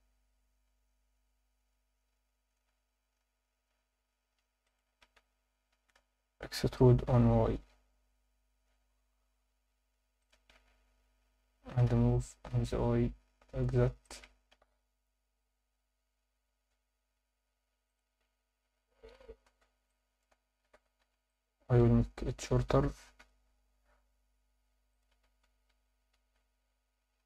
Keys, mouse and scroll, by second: 0.8-1.3 scroll up 2, 2.0 scroll up 1, 4.6 shift+click, 5.2 Tab, 5.7 Tab, 6.0 a, 6.8 e, 7.1 y, 10.2 shift+click, 10.5 scroll up 1, 10.8 Tab, 11.7 g, 11.8 y, 14.0 shift+click, 14.3 scroll down 2, 14.5 alt+a, 17.9 click, 18.2 Tab, 19.5 z, 19.9 alt+middle click, 20.6 alt+a, 21.0 b, 23.2 g, 23.5 z, 24.9 click, 25.1 z, 25.4 Tab, 26.4 Tab.